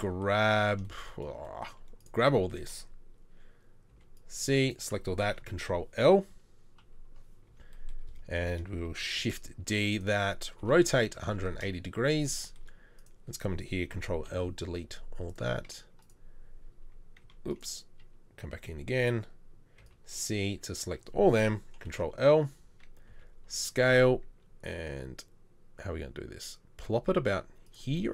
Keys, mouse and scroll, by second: 3.9 c, 5.6 ctrl+l, 6.8 KP_3, 9.2 shift+d, 10.6 r, 13.9 ctrl+l, 14.3 Delete, 17.2 Delete, 19.8 c, 21.8 ctrl+l, 23.1 ctrl+l, 23.1 s, 23.9 g.